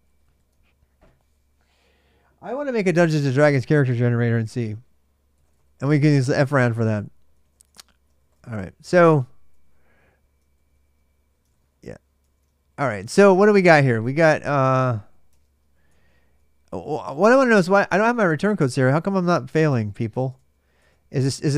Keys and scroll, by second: 4.9-5.9 typing, 7.0-10.4 typing, 10.4 ctrl+a, 10.5 ctrl+a, 11.2 ctrl+[, 11.3 ctrl+j, 11.4-21.5 typing, 12.4 ctrl+a, 12.6 ctrl+a, 20.1 Tab, 20.6 Return.